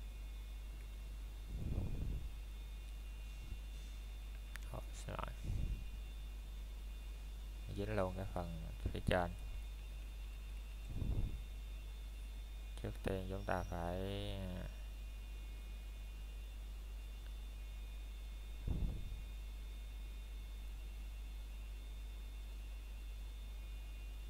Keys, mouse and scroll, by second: 1.5 x, 2.3 click, 2.7 scroll down 1, 2.8 middle click, 3.6 scroll up 1, 4.7 middle click, 5.3 scroll up 1, 5.3 typing, 7.3 middle click, 8.4-8.8 scroll down 1, 8.8 middle click, 9.3 ctrl+z, 11.1 middle click, 12.3 scroll up 1, 12.9 middle click, 14.8 scroll down 1, 15.3 middle click, 17.0 scroll down 1, 17.5 middle click, 18.0-18.8 scroll up 1, 18.8 click, 21.7 scroll up 1, 22.7 alt+shift+click, 24.0 scroll down 1.